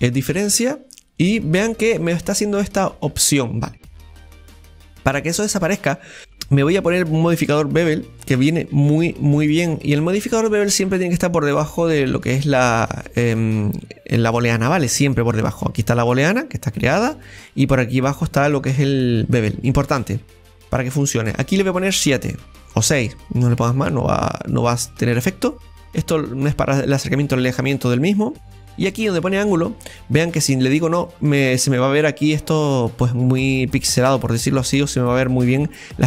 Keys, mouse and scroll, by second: 0.9-4.0 middle drag, 4.0 scroll down 1, 4.2-6.2 middle drag, 6.2-9.2 drag, 10.4-13.8 scroll down 1, 15.2 scroll down 2, 15.5-17.3 scroll up 1, 17.3 scroll up 3, 17.4-21.7 scroll down 2, 21.7-28.7 drag, 21.7 scroll down 4, 29.2-30.4 drag.